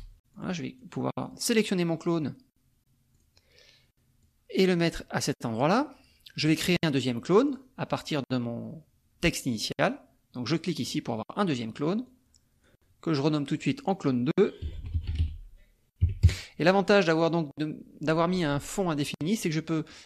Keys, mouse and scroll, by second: 0.3 click, 1.4 click, 3.1 click, 4.2-5.9 drag, 7.5 click, 10.8 click, 12.1 click, 13.5 click, 14.8 l, 15.1 n, 16.2 KP_Enter, 17.2-18.9 drag, 19.9 click.